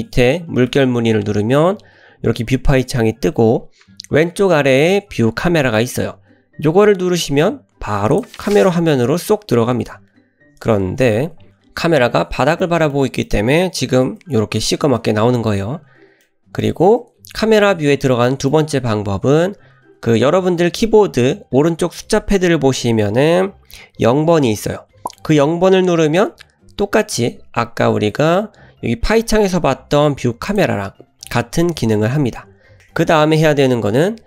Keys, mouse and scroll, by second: 10.2 KP_Decimal, 11.1 KP_0, 12.6-13.0 middle drag, 13.2 middle click, 14.1 KP_0, 15.0 KP_0, 16.2-16.7 middle drag, 18.3 middle click, 26.3 KP_0, 28.2 `.